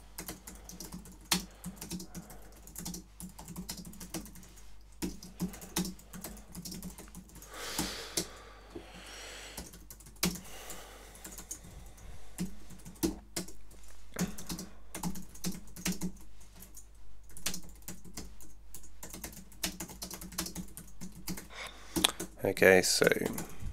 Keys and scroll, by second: 0.0-7.9 typing, 8.2 Tab, 9.3-23.7 typing, 22.2 Tab.